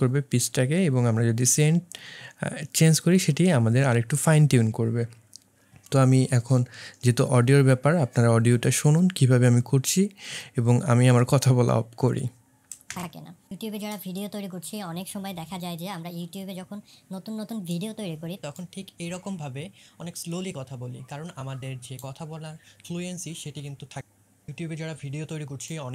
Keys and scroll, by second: 12.9 space.